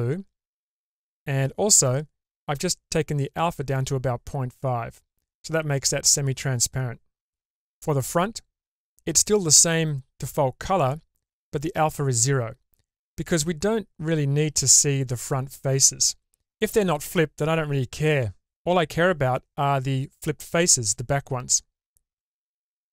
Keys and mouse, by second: 22.2-22.9 middle drag.